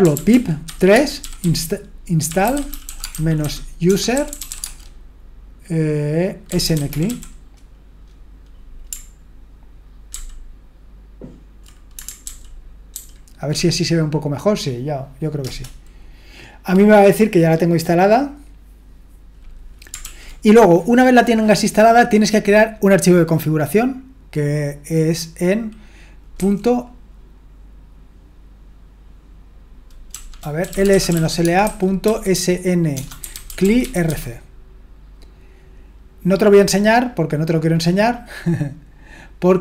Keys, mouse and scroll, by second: 0.0-5.1 typing, 6.2-7.6 typing, 10.1 ctrl++, 12.2 ctrl+*, 13.0 ctrl+*, 15.4 Return, 20.0 ctrl+l, 30.1-34.5 typing, 38.7-39.6 scroll down 1.